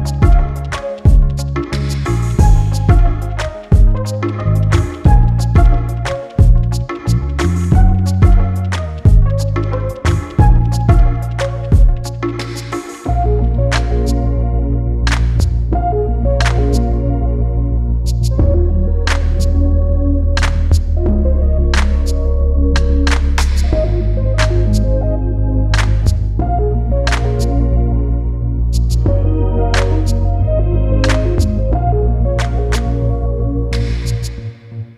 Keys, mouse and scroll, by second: 1.3 click, 1.7-2.1 scroll down 2, 2.1-3.2 middle drag, 3.2-3.5 scroll up 2, 3.5 middle click, 4.3-4.6 scroll down 1, 4.6 middle click, 5.0-5.9 scroll up 1, 5.9 middle click, 6.2-7.6 scroll up 1, 7.6-8.8 middle drag, 8.8-9.2 scroll down 1, 9.2-10.6 middle drag, 10.6-10.9 scroll down 1, 10.9 middle click, 11.3-12.0 scroll down 3, 12.0 click, 12.5-12.8 scroll up 3, 12.8-13.6 scroll down 1, 13.6 shift+d, 14.8-15.8 middle drag, 15.8 click, 16.2-16.6 scroll down 1, 16.9 g, 18.0-20.0 shift+middle drag, 20.9-21.9 drag, 22.6 scroll down 1, 22.8 middle click, 23.0-24.0 scroll up 8, 23.5 middle click, 24.0 middle click, 24.8 click, 25.9-26.6 scroll down 5, 26.6-27.3 scroll up 2, 27.3-28.8 shift+middle drag, 28.8-30.9 drag, 30.9 scroll down 2, 31.2-32.2 middle drag, 32.2 click, 32.5 scroll down 2, 32.7 middle click, 33.4-34.2 scroll up 3, 34.2 click.